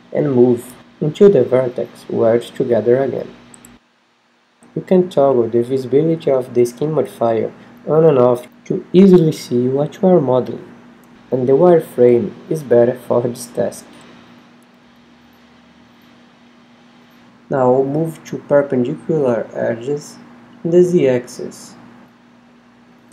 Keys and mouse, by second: 0.5 z, 0.5 a, 1.1 shift+d, 2.6 click, 3.1 r, 6.7 click, 7.6 a, 8.3 l, 8.5 click, 9.3 g, 16.9 g, 18.6 g, 19.5 click, 20.4-21.6 middle drag, 22.5-23.1 drag.